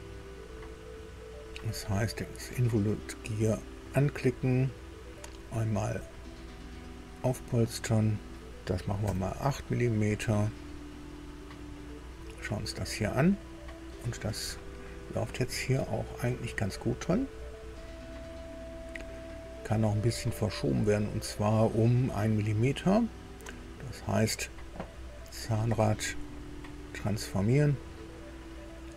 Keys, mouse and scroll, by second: 2.5 click, 6.8 click, 9.0 KP_8, 10.8 click, 11.7-14.2 middle drag, 14.6-14.9 scroll up 1, 15.4 scroll down 2, 15.8 shift+middle click, 16.6 shift+middle click, 17.3 scroll up 2, 17.8-20.0 middle drag, 25.2 scroll down 2, 25.9 click, 26.4 right click, 27.8 click.